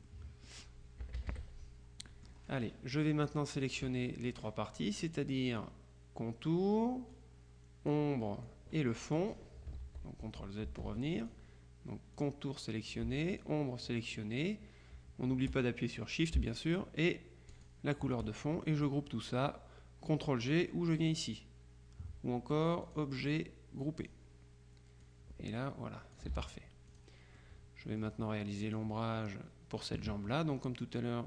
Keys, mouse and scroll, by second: 1.1 -, 2.1 click, 3.3 click, 7.2-8.5 drag, 9.9 ctrl+z, 11.3 ctrl+click, 12.3 click, 13.4 shift+click, 17.6 shift+click, 22.9 click, 24.1 click, 25.1-26.7 drag, 26.4 ctrl+z, 27.0 click, 28.7 click.